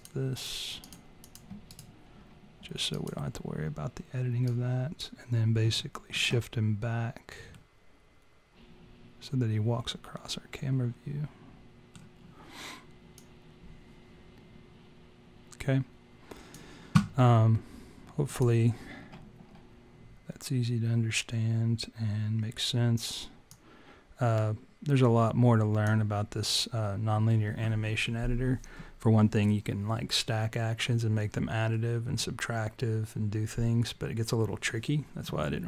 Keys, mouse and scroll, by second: 0.0 click, 1.3 click, 1.7 right click, 4.5 click, 5.8 alt+middle click, 7.5 middle click, 13.3 click, 23.9 click.